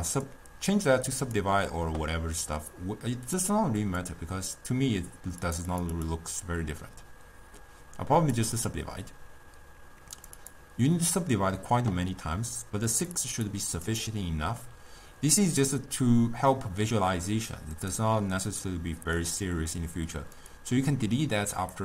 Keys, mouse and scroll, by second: 1.3 click, 3.9-8.5 drag, 10.3-21.8 drag.